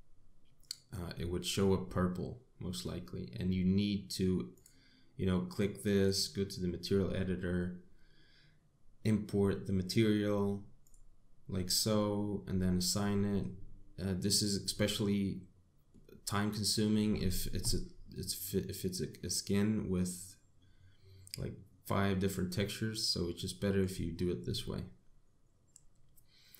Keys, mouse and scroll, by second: 4.4 click, 5.9 click, 10.7 click, 15.7 middle click, 18.0 middle click, 22.5 middle click.